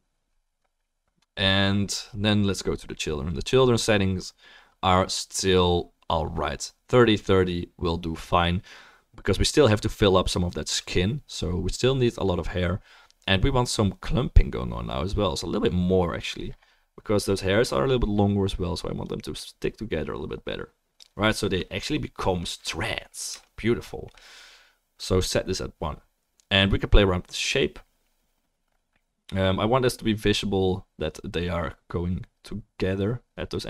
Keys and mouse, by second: 25.8-31.8 drag, 25.8-31.8 right drag.